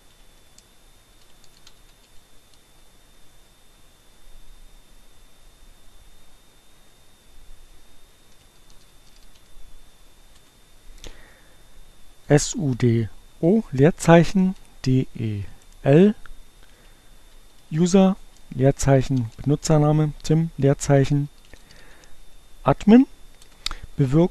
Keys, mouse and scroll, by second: 0.0-0.8 typing, 7.4 l, 8.6 o, 10.4 Return, 12.6-13.5 typing, 17.4 r, 18.0 space, 20.3 a, 23.4 Return.